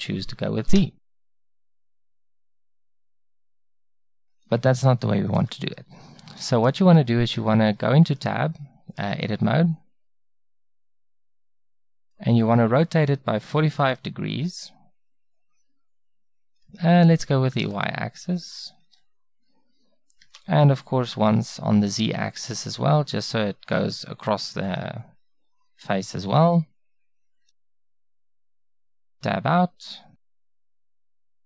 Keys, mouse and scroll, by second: 6.5-8.2 middle drag, 7.7 Tab, 13.8 r, 21.3 r, 31.3 Tab.